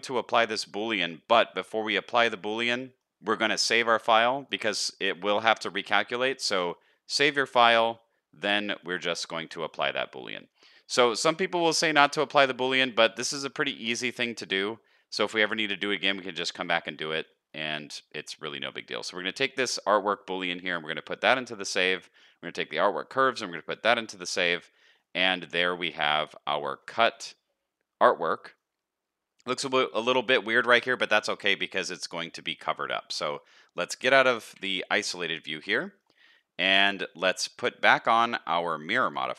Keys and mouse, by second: 1.4 shift+middle drag, 2.3 shift+middle drag, 2.8 middle click, 3.1 ctrl+z, 4.9 shift+drag, 5.7 shift+middle click, 6.5 middle click, 10.4 middle click, 11.9 shift+middle click, 12.2 middle click, 13.2 shift+middle click, 13.9-15.7 middle drag, 16.2 middle click, 17.1 middle drag, 18.2 middle click, 24.3 middle click, 24.8 middle click, 25.3-25.7 middle drag, 26.3 middle click, 26.9 middle drag, 28.3 middle drag, 31.0 middle click, 32.3 middle click, 34.5 KP_Divide, 35.5 alt+a, 35.7 middle click, 38.6-39.3 drag.